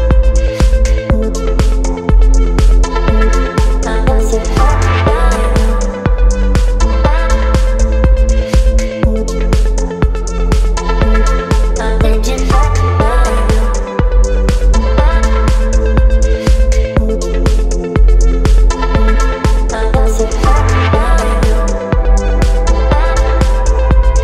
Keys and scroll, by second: 1.2 Delete, 1.6 space, 5.6 Delete, 7.9 Delete, 15.0 Delete, 17.0 Delete, 19.0 Delete, 21.2 Delete, 22.3 Delete, 22.6 space.